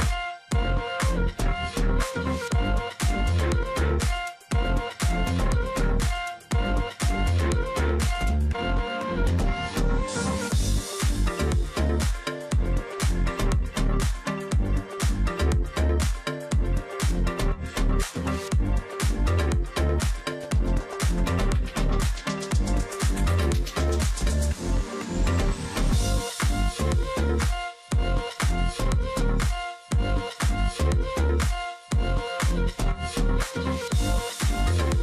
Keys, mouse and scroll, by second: 0.0 space, 1.1 ctrl+click, 1.2 ctrl+double click, 1.6 ctrl+z, 2.1 ctrl+click, 2.2 ctrl+double click, 3.6 ctrl+click, 5.1 shift+click, 6.0 alt+click, 6.6-7.2 alt+scroll down 1, 7.4 double click, 7.5 alt+scroll down 1, 7.8 space, 9.2 alt+scroll up 1, 9.3 space, 9.9 ctrl+click, 10.5 alt+scroll up 1, 10.7 space, 11.2 ctrl+click, 11.6 space, 13.5 ctrl+z, 14.5 alt+click, 15.4 space, 16.3 space, 18.3 space, 20.5 ctrl+click, 21.1 alt+scroll down 1, 21.4 alt+scroll up 1, 21.8 ctrl+click, 22.4 ctrl+click, 25.6 shift+click, 26.8 alt+click, 27.2 ctrl+click, 27.4 alt+scroll down 1, 28.1-28.6 alt+scroll up 1, 29.0-29.7 alt+scroll up 1, 29.7 ctrl+click, 29.9-30.4 alt+scroll up 1, 31.4 space, 32.8 ctrl+z, 34.0 space.